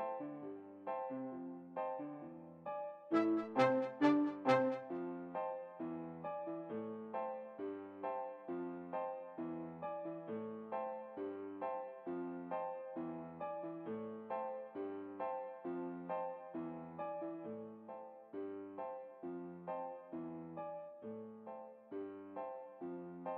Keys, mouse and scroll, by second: 0.7 middle click, 0.7-1.9 right drag, 1.1-2.5 middle drag, 3.6-5.5 middle drag, 6.0 r, 9.9-11.3 right drag, 11.0 g, 15.1-16.6 right drag, 16.2 v, 19.2-20.7 right drag, 20.0 g.